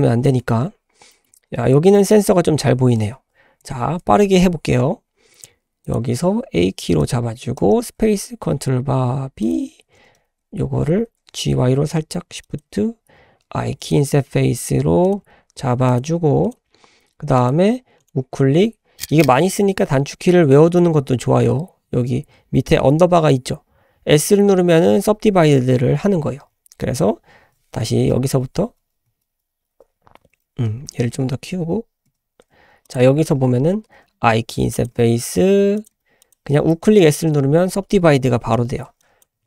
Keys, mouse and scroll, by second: 0.3 shift+middle click, 0.6-1.0 scroll up 3, 1.1 shift+middle drag, 1.4-1.9 scroll up 2, 1.9 shift+middle click, 2.2-2.6 scroll up 2, 3.6 k, 8.5 ctrl+b, 10.0 g, 11.3 g, 13.1 i, 14.1 s, 15.2 g, 16.0 s, 16.6 g, 18.0-27.2 right drag, 27.9 ctrl+z, 28.1 ctrl+z, 29.3 ctrl+z, 29.7 ctrl+z, 30.9 s, 34.7 i, 34.9 s, 35.9 g, 37.0-39.0 right drag, 39.0-39.3 drag.